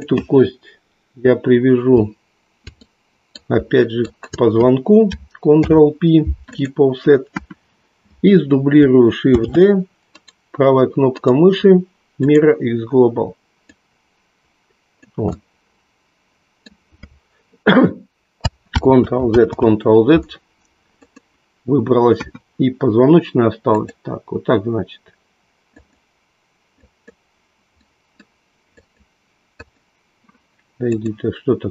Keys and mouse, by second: 2.8 middle click, 4.0 shift+click, 5.8 ctrl+p, 7.4 KP_1, 9.3 shift+d, 11.9 right click, 13.6-15.2 drag, 15.4-16.9 middle drag, 19.3 ctrl+z, 22.3 KP_1, 23.7 click, 25.7 click, 26.8 click, 27.8 middle click, 28.8 click, 29.7 click.